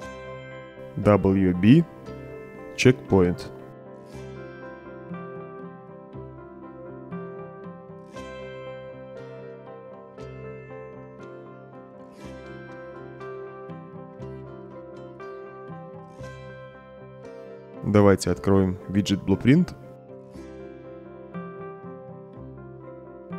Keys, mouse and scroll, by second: 1.3 w, 2.0 b, 2.5 shift+-, 3.9-6.9 typing, 8.0 Return, 10.4 click, 11.5 click, 16.3 click, 17.1 click, 19.3 click, 22.7-23.3 drag.